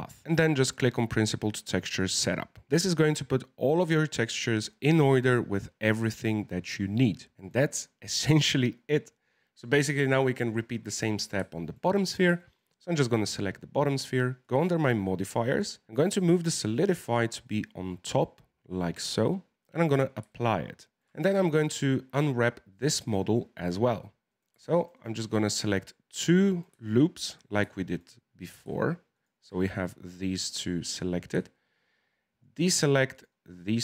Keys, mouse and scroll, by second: 2.6 scroll down 2, 2.7-6.5 middle drag, 6.5-7.3 scroll up 2, 7.3-10.2 middle drag, 10.2 click, 11.0-12.9 middle drag, 12.9 right click, 14.4 click, 16.3-20.3 drag, 20.3-21.1 shift+middle drag, 21.1 Tab, 21.3-24.3 middle drag, 24.3 right click, 24.8 alt+shift+right click, 24.9 alt+shift+right click, 25.4-27.4 middle drag, 27.4 scroll up 2, 27.7 shift+middle click, 28.1-29.1 scroll up 1, 29.1 alt+shift+right click, 29.6-32.4 middle drag, 32.4 shift+right click, 33.1 shift+right click, 33.4-33.8 shift+middle drag.